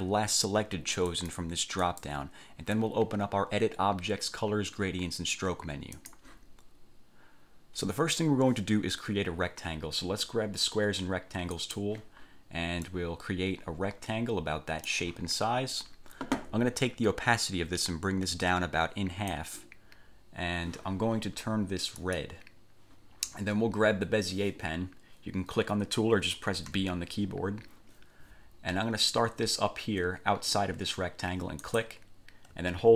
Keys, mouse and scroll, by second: 1.3 click, 2.0 click, 6.1 click, 11.7 click, 13.0-15.2 drag, 18.0-19.7 drag, 22.1 click, 26.9 b, 31.8 click.